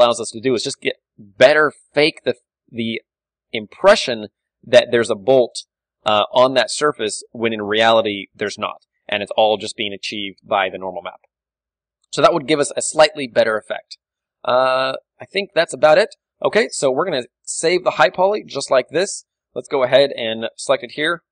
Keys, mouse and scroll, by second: 0.9-3.2 drag, 1.0 Tab, 3.2-5.6 middle drag, 5.3 a, 5.6-8.2 right drag, 6.7 a, 8.2-9.9 middle drag, 11.5 KP_Divide, 11.8 KP_1, 12.6 KP_5, 13.3 ctrl+w, 14.3 z, 15.5 click, 15.5 d, 15.8 z, 16.2-18.9 middle drag, 16.2-17.5 right drag, 18.9-21.1 right drag, 19.2 z, 19.3-21.3 middle drag.